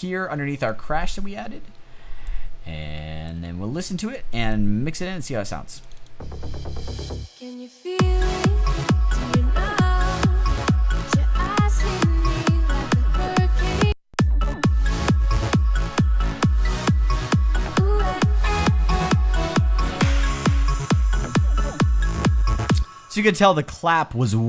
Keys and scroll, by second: 22.2 space.